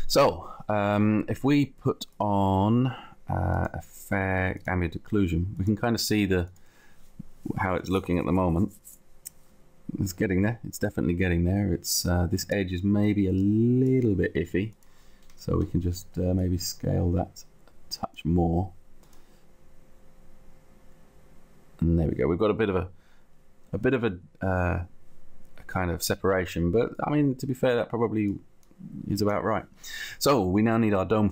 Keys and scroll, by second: 15.9 t.